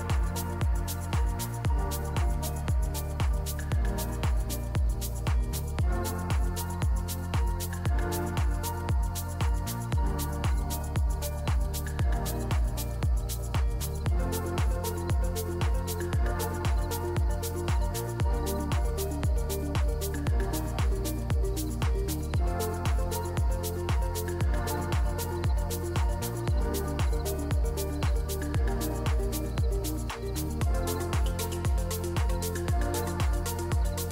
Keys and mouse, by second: 1.2 ctrl+click, 2.6 click, 6.2 click, 10.5 click, 12.0 click, 13.1-15.3 ctrl+middle drag, 15.3 click, 16.6-19.3 drag, 23.2 click, 27.2 click, 32.4 click, 33.0 ctrl+s, 33.0 ctrl+Tab, 33.6 click.